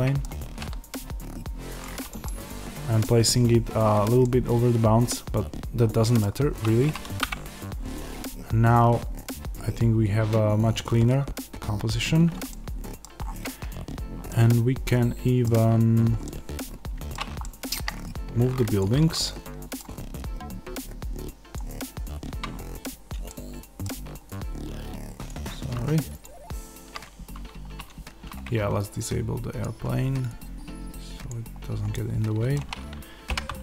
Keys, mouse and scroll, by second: 0.5 g, 1.7 click, 2.2-18.7 middle drag, 6.1-7.1 scroll down 1, 7.1 KP_0, 7.9-12.4 scroll down 1, 13.1 scroll up 1, 13.8-14.2 scroll down 1, 18.7 click, 19.0-21.4 middle drag, 21.4 click, 23.2-25.2 middle drag, 25.2 click, 26.2 shift+click, 29.4-31.2 drag, 31.8-33.6 middle drag, 33.3 g.